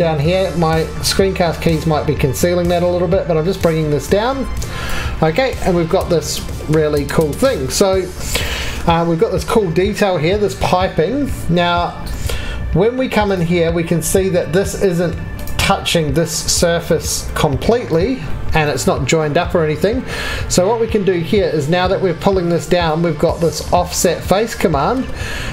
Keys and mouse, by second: 14.9 4, 16.0 3, 24.9-25.5 middle drag.